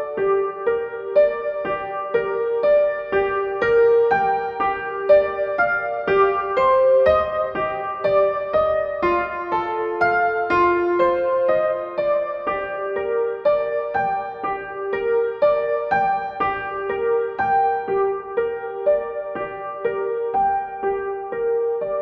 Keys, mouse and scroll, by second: 12.2 click, 18.2 click, 19.1 click.